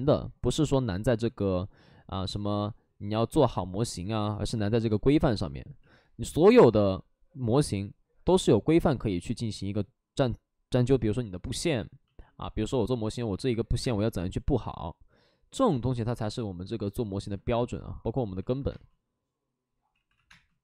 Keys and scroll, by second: 1.6 alt+s, 3.2 space, 5.7 ctrl+z, 12.2 alt+s, 12.9 3, 13.7 space, 18.6 space, 19.8 space, 19.8 ctrl+z, 20.0 x, 20.1 space.